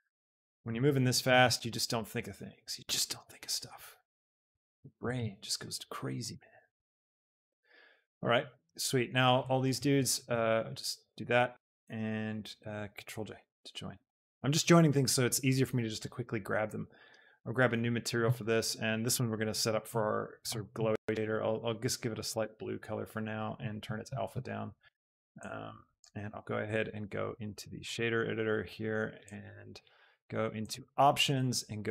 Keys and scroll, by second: 0.6 d, 1.4 z, 4.3 shift+d, 4.7 Escape, 5.0 r, 5.4 z, 10.2 shift+b, 13.5 ctrl+j.